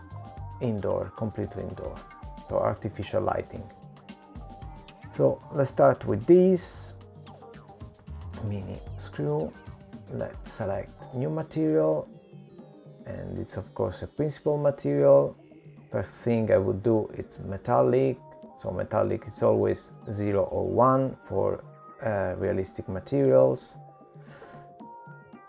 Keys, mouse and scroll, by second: 1.2 click, 4.5 middle click, 6.2 shift+middle click, 8.0 click, 9.5 shift+middle click, 11.5 click, 14.3 click, 15.7 middle click, 17.2 middle click, 20.4 click, 23.1 middle click.